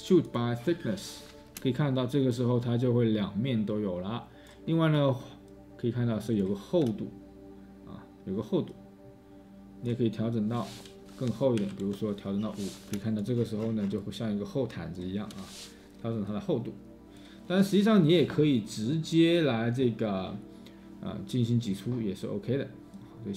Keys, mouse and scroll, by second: 3.8-6.8 scroll, 6.8 space, 6.8 space, 8.5 space, 11.6-15.3 5, 11.7 Return, 13.5-14.4 space.